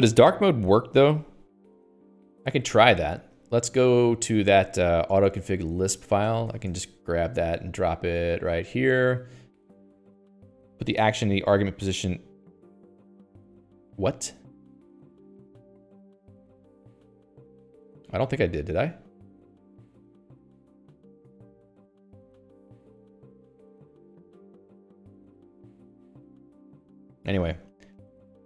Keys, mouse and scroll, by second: 2.4 Escape, 2.6 Escape, 2.8 k, 3.0 k, 3.2 k, 4.9 ctrl+alt+j, 5.5 Return, 5.8 Escape, 6.0-11.0 typing, 7.0 Return, 7.4 Escape, 7.5 Escape, 11.4 Escape, 15.7 click, 17.3 Escape, 17.4 Escape, 18.3 k, 19.4 click, 20.6 Escape, 20.7 Escape, 21.9 Escape, 24.6 Escape, 24.9 Escape, 25.7 Escape, 25.8 Escape, 27.4 Escape, 27.5 Escape, 27.6-28.4 typing.